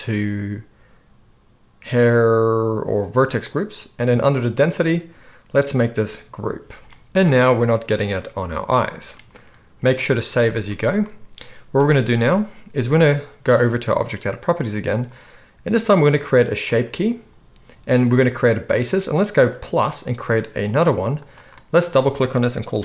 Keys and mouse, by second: 3.4-14.1 drag, 10.3 ctrl+s, 10.5 ctrl+s, 14.1-16.6 middle drag, 16.6-21.2 drag, 21.2 middle click, 21.3-22.8 drag.